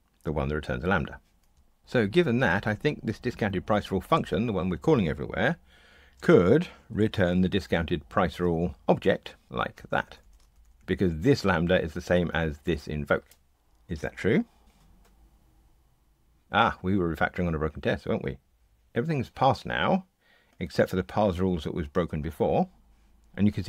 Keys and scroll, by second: 8.4 Return, 9.4 Tab, 14.6 ctrl+r.